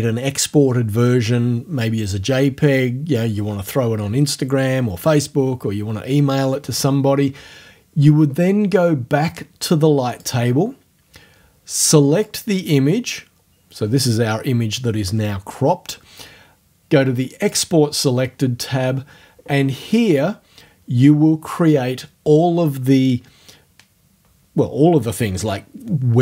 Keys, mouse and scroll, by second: 10.1 click, 12.2 click, 17.4 click.